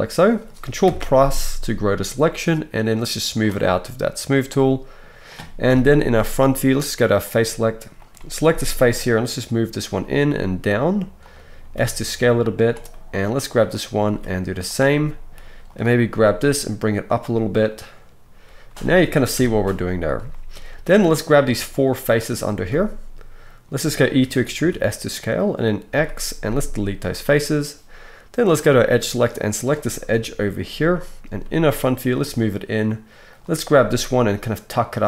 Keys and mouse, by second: 0.8 ctrl+KP_Add, 2.3-4.0 drag, 2.3-8.1 middle drag, 5.6 KP_1, 8.1 right click, 8.7-13.6 drag, 8.8 g, 11.6 s, 13.6-15.3 right drag, 13.7 click, 13.7 middle click, 14.0 s, 15.3-20.3 drag, 15.6 right click, 16.2 g, 19.3 KP_1, 20.3 right click, 21.2 middle click, 21.3 shift+right click, 22.0 middle click, 22.1 right click, 22.4 shift+middle click, 22.6-28.4 right drag, 24.2 e, 25.9 x, 28.4 middle click, 29.4-35.0 right drag, 30.1 KP_1, 31.4 g, 33.6 g.